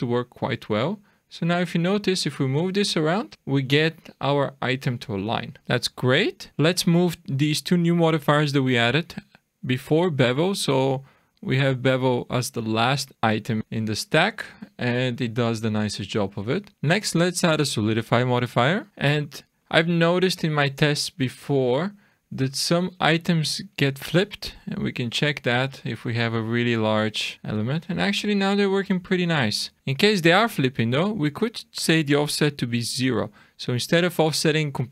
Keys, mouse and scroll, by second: 0.3 click, 1.6 click, 5.2-5.6 scroll down 2, 5.6 shift+middle click, 5.6 scroll up 3, 6.5 ctrl+z, 6.5 click, 9.7 click, 11.5 click, 13.6 shift+middle click, 13.6-14.0 scroll down 1, 14.4 shift+middle click, 15.1 middle click, 15.7-16.4 scroll up 5, 16.4 middle click, 16.6 scroll down 1, 18.9-19.5 scroll down 11, 19.5 shift+middle click, 21.6 shift+scroll down 1, 22.0-22.5 scroll up 4, 22.5 middle click, 23.1 shift+middle click, 24.7 click, 26.1-26.5 scroll down 2, 27.9 shift+middle click, 30.8 click, 31.5 click, 34.3 click.